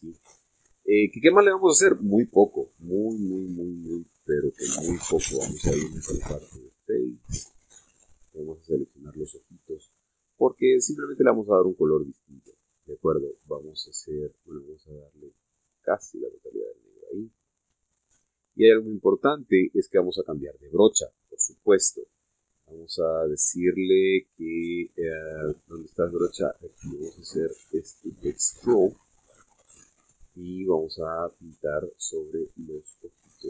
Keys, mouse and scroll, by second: 1.2 right click, 1.5 scroll up 2, 1.8 scroll down 2, 1.9 scroll up 2, 2.1 scroll down 2, 2.4-3.7 shift+middle drag, 3.8-4.8 shift+middle drag, 5.0 shift+scroll up 2, 5.2-6.0 scroll down 2, 6.3 ctrl+Tab, 7.1 click, 7.9 right click, 8.7 shift+right click, 12.7-13.3 scroll up 2, 15.5-17.4 drag, 17.8-18.2 scroll up 2, 18.2-18.7 scroll down 2, 18.8 shift+middle click, 23.5 click, 24.2 click, 26.9 click, 29.5 click, 32.9-33.4 scroll up 1.